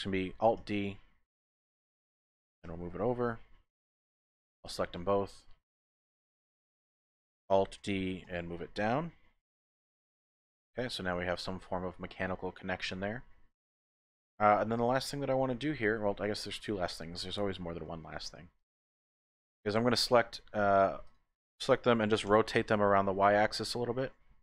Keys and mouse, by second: 0.7 alt+d, 2.6 x, 4.1 click, 4.7 typing, 5.1 shift+click, 6.3 shift+click, 7.8 alt+d, 8.2 z, 10.9 click, 12.2 click, 12.5 middle click, 13.4-14.9 drag, 13.4 typing, 15.2 shift+click, 17.3 click, 18.0 shift+click, 19.4 typing, 19.7 click, 20.1 shift+click, 21.0 click, 22.3 r, 22.6 y.